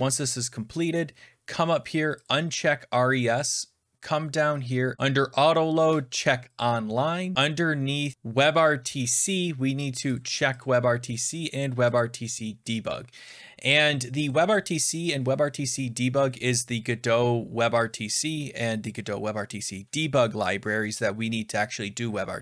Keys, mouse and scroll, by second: 2.2 click, 3.6-4.9 scroll down 4, 4.9 click, 6.5 click, 7.3-7.7 scroll down 5, 8.0-8.8 scroll down 6, 8.1 click, 10.1 click, 10.5 click, 11.3 click, 11.9 click.